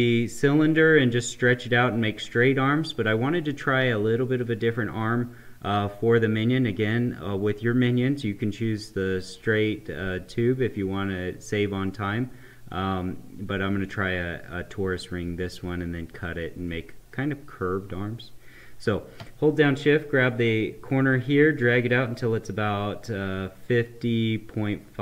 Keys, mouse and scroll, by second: 19.3 shift+Num_Lock, 19.6-25.0 shift+drag.